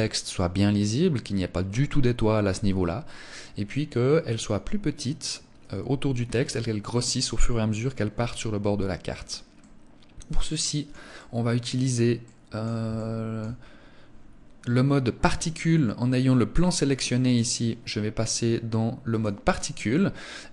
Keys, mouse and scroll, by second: 8.9 middle click, 10.5 middle click, 12.3 middle click, 12.5 shift+middle click, 12.9 scroll up 1, 16.6 right click, 17.6 click, 18.5 click.